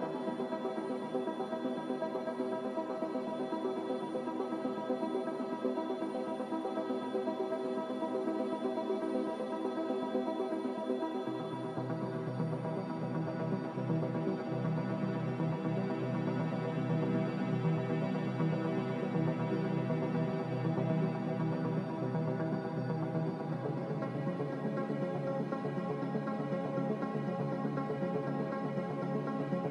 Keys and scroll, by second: 13.5 Delete.